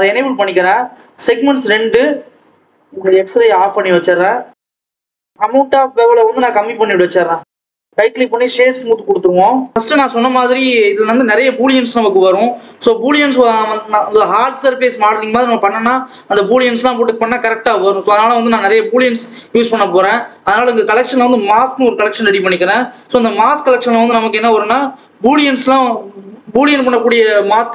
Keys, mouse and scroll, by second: 1.9-2.8 scroll up 1, 3.2-7.6 drag, 7.6 right click, 8.2 click, 8.5 right click, 9.1-9.6 scroll up 2, 9.6 ctrl+s, 9.7 click, 10.5 scroll up 1, 10.7-12.9 scroll down 1, 19.6 click, 19.9 right click, 20.7 click, 20.9-22.4 drag, 22.4 ctrl+s, 23.5-24.2 scroll down 1, 24.2 click.